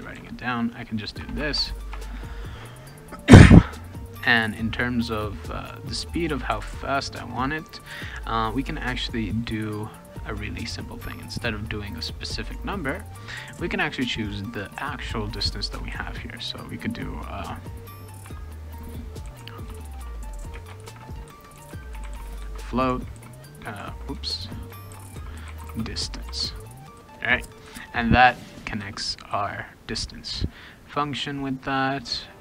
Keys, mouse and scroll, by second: 0.1 ctrl+v, 0.6 click, 1.2 BackSpace, 1.4 BackSpace, 1.5 BackSpace, 1.9 BackSpace, 11.3 click, 11.6 click, 12.7 click, 13.1 click, 13.3 click, 15.4 click, 15.6 click, 15.9 ctrl+c, 16.6 click, 16.8 click, 19.0-22.6 typing, 23.2 ctrl+d, 23.8 ctrl+z, 24.6-26.3 typing.